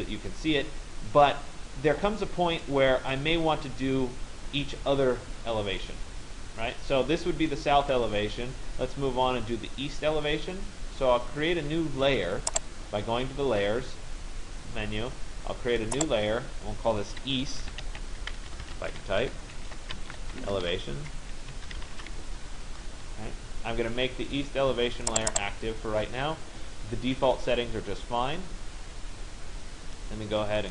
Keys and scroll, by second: 18.0 BackSpace, 18.8 Caps_Lock.